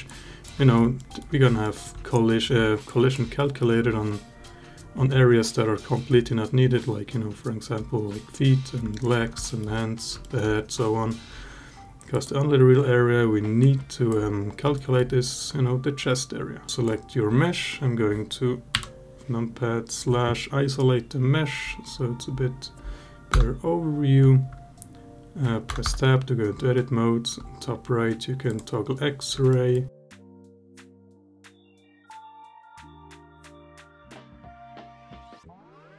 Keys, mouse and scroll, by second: 0.8 alt+middle drag, 1.4 alt+middle drag, 2.7-3.0 alt+drag, 8.7 alt+middle drag, 9.3 alt+middle click, 10.0 alt+middle drag, 11.9 click, 13.4-13.9 alt+drag, 14.6 alt+middle drag, 16.7 Tab, 16.7 click, 23.2 Tab, 25.5 Tab, 25.7 Tab, 28.3 click, 29.3 alt+middle click, 33.0 alt+middle click, 35.8-35.9 drag.